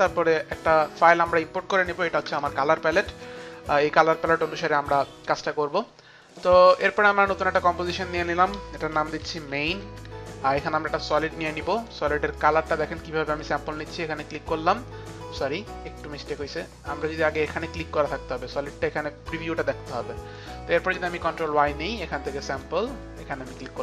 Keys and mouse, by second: 0.0 click, 1.2 click, 2.2 Return, 5.4 Return, 6.3 Return, 6.3 click, 7.2 click, 8.6-11.5 typing, 12.2 click, 13.7 click, 16.0 click, 16.3 click, 17.2 click, 20.2 click, 21.3 ctrl+y, 21.3 click, 22.4 click, 23.5 ctrl+y, 23.5 click.